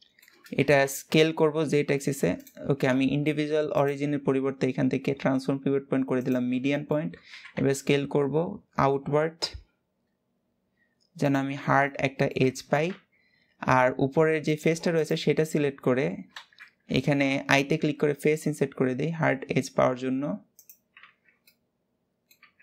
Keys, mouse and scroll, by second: 0.3 s, 3.4-6.4 drag, 6.4 shift+middle click, 7.0 s, 11.2 Tab, 11.5-12.6 middle drag, 12.6 Tab, 14.2 click, 14.6 click, 15.4 alt+z, 16.0 alt+z, 17.5 i, 20.7 Tab, 21.1-22.1 middle drag, 22.1 Tab.